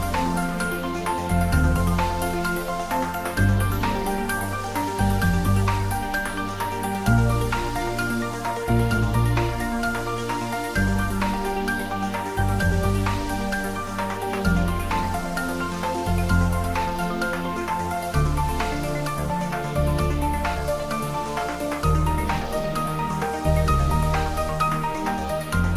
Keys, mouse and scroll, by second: 3.6-5.8 drag, 5.8 scroll up 1, 6.9-7.5 scroll down 1, 7.5-9.8 middle drag, 9.8 Tab, 23.6-24.7 scroll up 1, 25.6-25.7 drag.